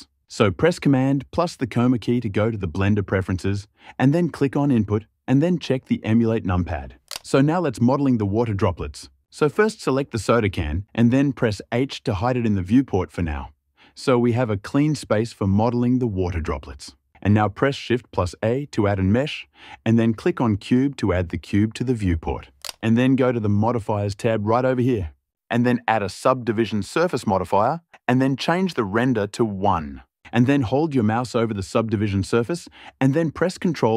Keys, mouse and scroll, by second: 1.1 super+,, 10.0 click, 11.9 h, 17.7 shift+a.